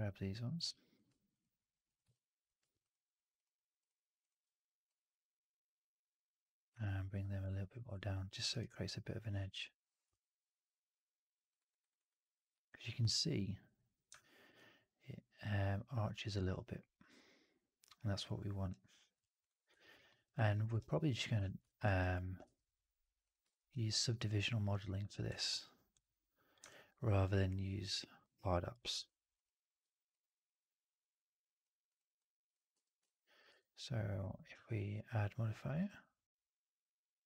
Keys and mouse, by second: 0.6 alt+click, 2.0 alt+click, 6.7-8.3 alt+drag, 8.4 alt+right click, 8.5-11.4 alt+drag, 11.4 alt+right click, 11.7 alt+right click, 11.8 alt+right click, 20.1 alt+middle click, 20.2 alt+middle click, 20.5 alt+middle click, 20.7 alt+right click, 20.8 alt+click, 21.3 4, 21.7 right click, 22.0 click, 22.3 2, 23.1 click, 26.6 click, 31.8 click, 32.6 4, 33.4 q.